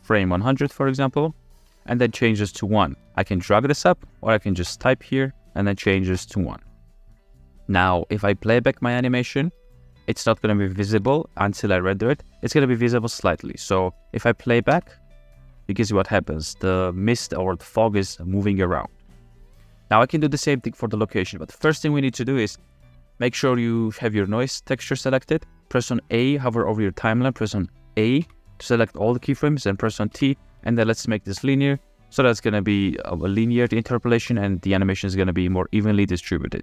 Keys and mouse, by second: 3.3-4.4 drag, 5.0-6.4 drag, 9.5 click, 12.3 ctrl+s, 15.0 space, 20.3 space, 21.8 space, 23.9 click, 28.3 a, 30.1 t, 32.9 click, 34.3 space.